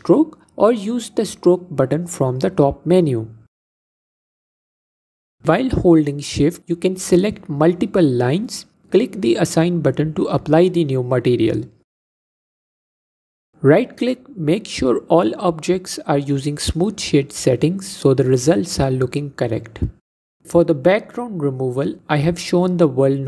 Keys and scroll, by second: 9.2 Tab.